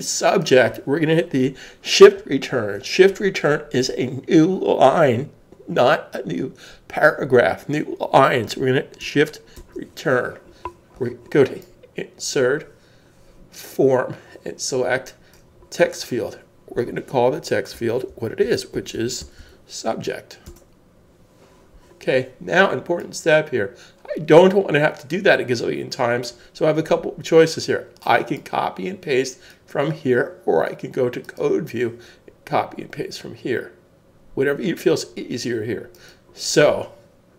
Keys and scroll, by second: 9.5 shift+Return, 17.7-19.9 typing, 20.4 Return, 21.0 typing.